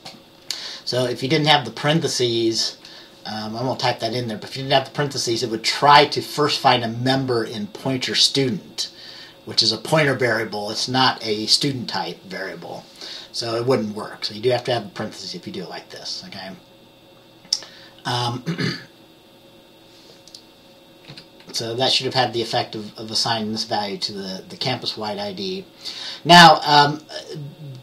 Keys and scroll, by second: 21.2 F10.